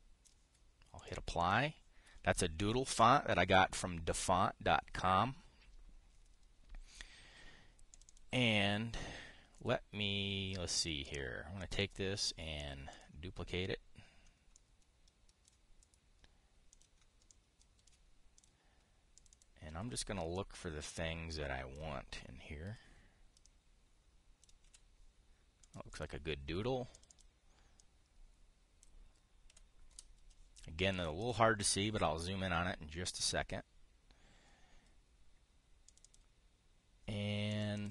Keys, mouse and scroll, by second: 0.5 click, 2.1 click, 2.3-3.5 drag, 3.6 click, 8.6 click, 11.4 click, 11.7 click, 12.3 click, 13.6 click, 16.5 click, 17.4 click, 18.7 click, 19.9 click, 21.1-22.5 drag, 23.4 Delete, 24.1-25.2 drag, 25.3 Delete, 26.3 drag, 26.6 click, 27.6 click, 28.5-29.6 drag, 30.2 Delete, 30.6 Return, 31.7 click, 31.9 click, 36.6 click.